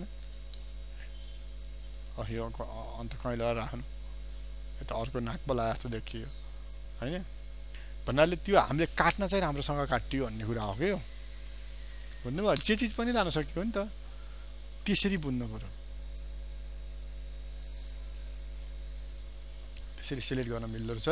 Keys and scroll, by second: 11.8 ctrl+alt+z.